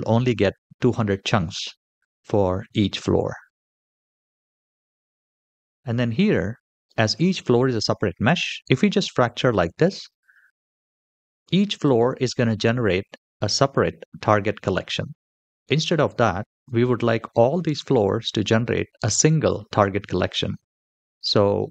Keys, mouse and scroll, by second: 0.1-0.9 middle drag, 4.2-7.4 scroll down 2, 13.6-14.3 scroll up 1, 14.3-16.7 scroll up 1, 20.0-21.7 scroll down 1.